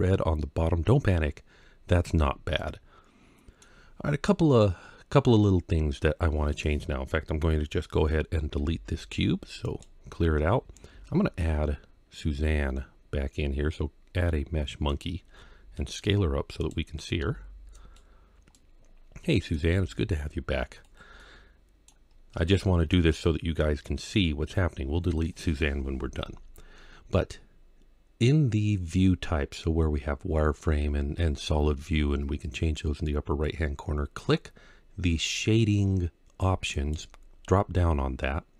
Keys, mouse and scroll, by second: 2.4-3.4 middle drag, 8.4 x, 10.7 shift+a, 15.4 s, 16.4 click, 17.0 s, 17.6 click, 18.4-19.4 middle drag, 19.5 g, 19.6 z, 20.7 click, 21.0-21.7 middle drag, 21.9 scroll up 1, 22.3-22.8 shift+middle drag, 22.9-24.0 middle drag, 36.5-38.5 drag.